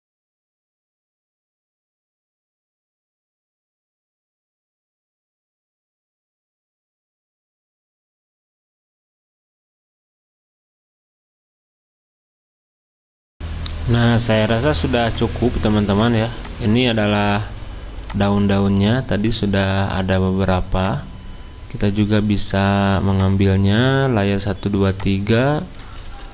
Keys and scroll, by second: 1.8 ctrl+d, 2.0 ctrl+z, 5.3 ctrl+shift+j, 7.2 w, 7.4 w, 8.2 ctrl+shift+j, 8.8 ctrl+d, 10.0 ctrl+shift+j, 13.1 ctrl+shift+j, 14.5 v, 26.0 BackSpace.